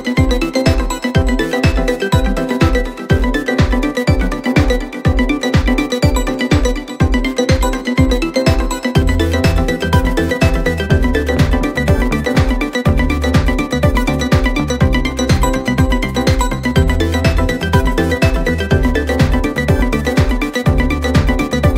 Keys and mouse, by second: 15.3 middle click, 15.6 middle click.